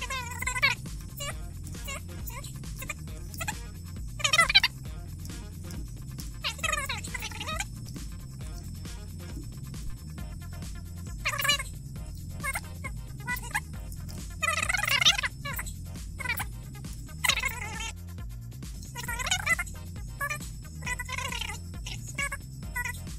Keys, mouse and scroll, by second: 0.1 click, 1.8 click, 2.1 6, 2.9 click, 3.2 7, 4.3 Tab, 4.7 click, 5.3 click, 5.6 8, 5.8 click, 5.9 Tab, 6.3 scroll up 2, 7.1 Tab, 7.5 click, 7.6 Tab, 8.1 click, 9.5 click, 10.4 BackSpace, 10.9 Tab, 12.6 click, 13.1 1, 13.5 click, 15.3 1, 15.5 click, 16.0 click, 16.6 Tab, 17.4 click, 18.5 click, 19.3 click, 19.5 click, 20.3 click, 20.8 click, 21.1 click, 21.7 click, 22.3 click, 22.7 click, 23.0 click.